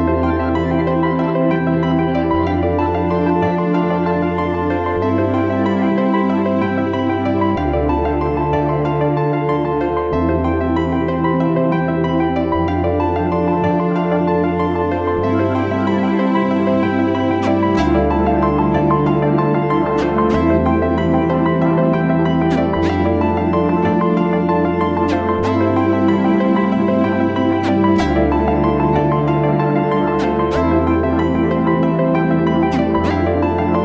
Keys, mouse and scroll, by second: 0.4 right click, 1.7 ], 2.1 ], 2.1 ], 5.8 double click, 7.4 ], 10.4 typing, 19.7 alt+click.